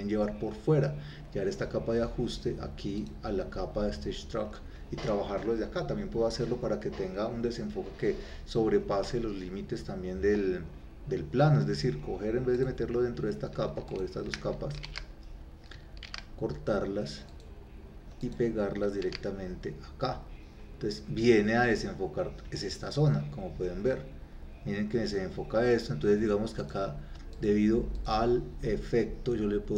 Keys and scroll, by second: 14.9 ctrl+c, 16.1 ctrl+x, 19.1 ctrl+v.